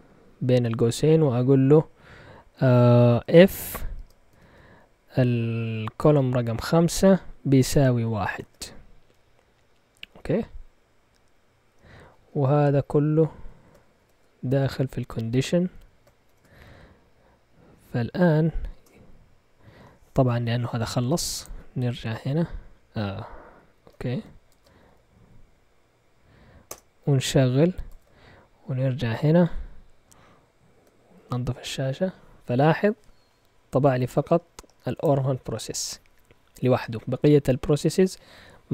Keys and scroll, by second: 2.9-4.3 typing, 6.0-8.8 typing, 12.0 Left, 12.2 Left, 12.3 Left, 12.5 Left, 12.6 Left, 12.8 Left, 12.9 Left, 13.0 Left, 13.2 Left, 13.3 Left, 14.0 shift+[, 15.2 End, 15.2 typing, 15.6 Left, 16.2 shift+], 18.7 Return, 22.1 Up, 23.4 Down, 23.7 Up, 24.5 ctrl+Tab, 24.8 Up, 26.6 Return, 27.8 ctrl+Tab, 31.1 ctrl+l, 31.5 Return.